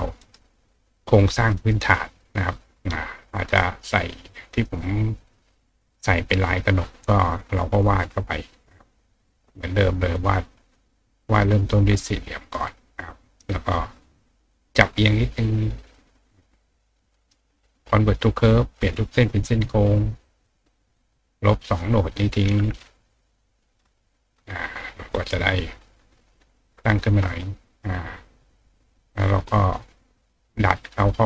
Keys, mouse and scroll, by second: 0.2 right click, 1.0 click, 3.8 click, 6.9 click, 7.8-9.2 drag, 10.1 click, 10.7 click, 12.4 click, 14.4 click, 15.2 click, 15.9 click, 17.1 right click, 18.0 click, 18.8 click, 19.2-19.6 drag, 20.4 click, 21.0-22.2 drag, 22.6-23.4 drag, 24.1 click, 25.1 click, 25.8 click, 26.6-27.8 ctrl+drag, 28.2 click, 28.9 click, 29.5 click, 31.0 click.